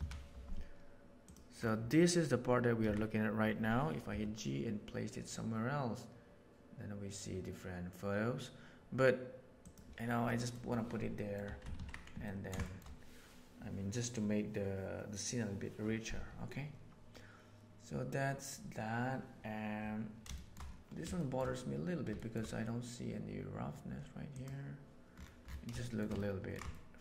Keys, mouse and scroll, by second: 2.8 a, 4.0 g, 10.2 middle click, 10.3 click, 11.1 click, 11.4 Tab, 11.7 alt+a, 12.2 ctrl+middle drag, 12.6 shift+middle click, 20.3 shift+middle click, 21.1 shift+middle drag, 22.2 shift+middle drag, 24.2 click, 25.7 shift+middle drag, 26.1-26.4 ctrl+middle drag, 26.7 shift+middle drag.